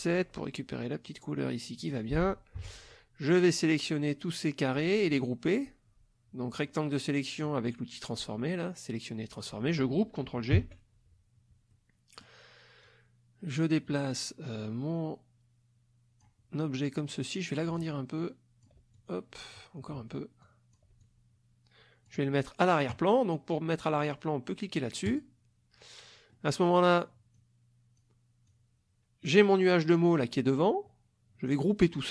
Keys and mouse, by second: 1.8 click, 2.6 F1, 3.3-5.3 drag, 6.5 click, 10.6 ctrl+g, 11.7 click, 12.8-16.4 drag, 17.8-18.8 ctrl+drag, 18.9 ctrl+click, 20.4-20.9 ctrl+drag, 21.0-22.3 ctrl+drag, 25.1 click, 26.3-26.9 middle drag, 27.3 click, 28.5-29.9 drag.